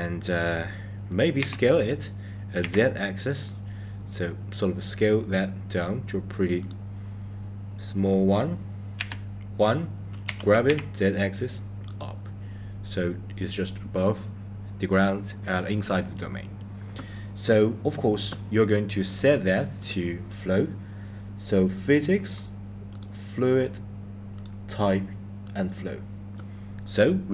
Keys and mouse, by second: 1.3 s, 8.9 KP_1, 10.2 g, 19.0 click, 19.8 click, 22.9 click, 24.4-25.6 drag.